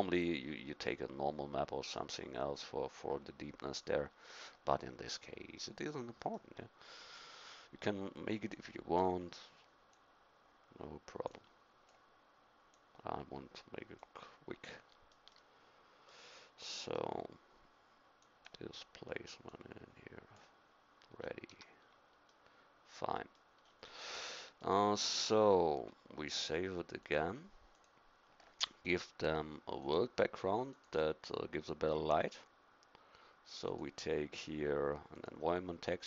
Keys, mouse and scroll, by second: 1.8 middle click, 8.7 click, 15.3-16.8 middle drag, 16.8-18.3 drag, 21.2 middle click, 21.5 a.